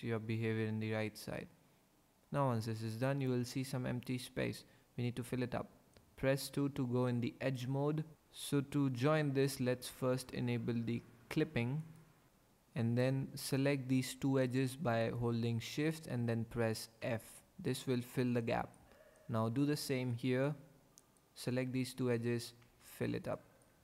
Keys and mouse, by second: 6.2 2, 11.8 click, 12.3 ctrl+z, 15.0 shift+click, 17.0 f, 21.0 shift+click, 22.6 f, 23.6 middle click.